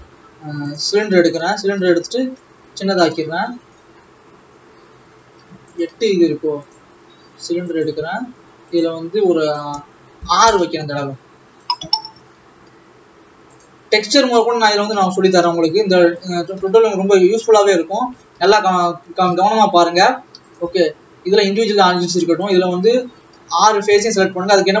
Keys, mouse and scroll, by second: 0.8 shift+a, 1.7 s, 7.8 shift+a, 10.5-12.2 drag, 12.2 s, 14.0 s, 15.0-15.7 scroll up 7, 15.7 s, 16.8 ctrl+s, 17.2 click, 18.0 scroll up 4, 18.3 alt+a, 18.6-21.0 scroll down 2, 21.4 click, 22.3 Tab, 24.5 alt+a.